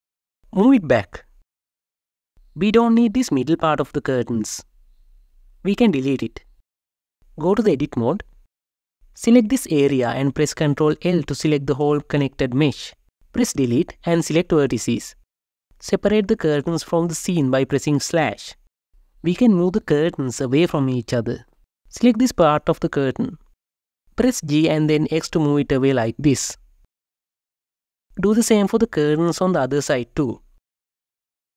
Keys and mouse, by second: 0.1 y, 5.1 KP_0, 9.4 click, 9.8-11.0 drag, 11.1 ctrl+l, 13.9 Delete, 17.4 KP_Divide, 20.2 click, 22.2 ctrl+l, 23.0 KP_7, 24.5 g, 24.6 x, 28.8 click, 29.9 ctrl+l, 30.7 g, 30.8 x.